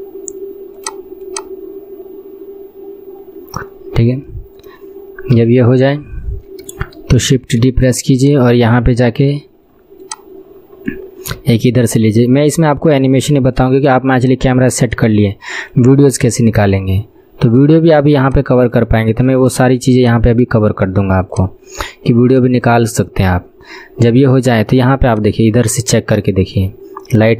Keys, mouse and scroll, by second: 1.4-4.0 drag, 4.0-4.4 scroll down 1, 4.4-5.5 middle drag, 5.5 KP_7, 5.9 scroll down 4, 7.4 shift+d, 8.3-9.3 drag, 9.3-9.8 scroll down 1, 10.1-11.4 drag, 10.1 scroll down 1, 11.4 r, 14.3-16.4 drag, 16.4 r, 18.3-25.2 drag, 25.2-27.3 drag.